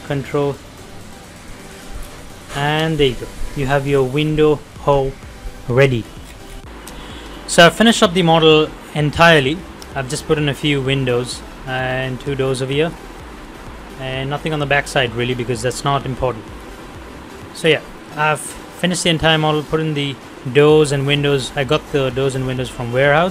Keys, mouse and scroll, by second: 0.0 middle click, 1.6 click, 2.0 scroll down 1, 2.2 middle click, 3.2 scroll up 1, 3.6 middle click, 6.1 scroll down 1.